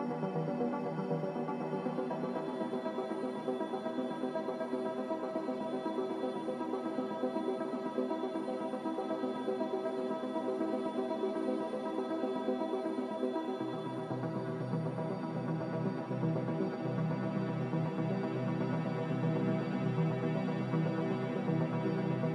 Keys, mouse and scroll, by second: 1.5 Escape, 11.2 b.